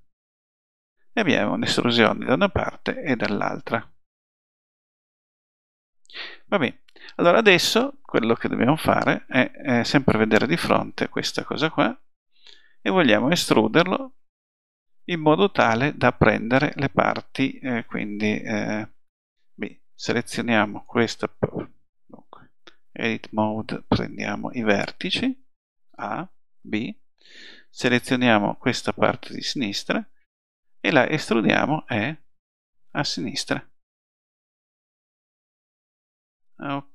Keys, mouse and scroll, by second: 1.0 click, 1.2 middle click, 10.0 KP_1, 14.0 KP_1, 19.2 b, 25.9 a, 26.6 b, 31.6 e.